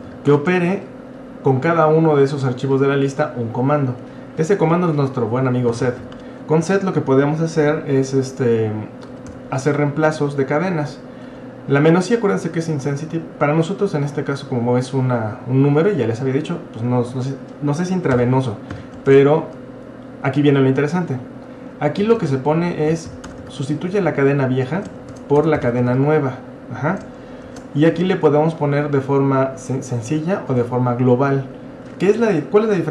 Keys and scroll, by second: 0.0-0.6 typing, 5.5-6.5 typing, 8.9-9.8 typing, 11.3 typing, 18.1-19.1 typing, 21.8-26.4 typing, 27.5 typing, 30.5 typing.